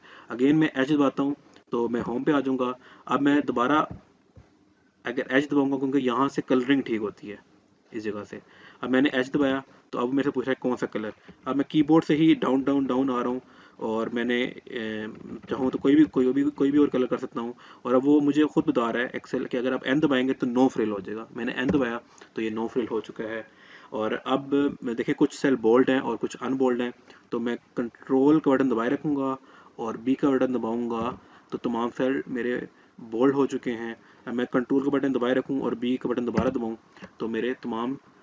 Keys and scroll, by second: 0.5 h, 8.4 h, 20.2 n, 27.3 ctrl+b, 35.3 ctrl+b.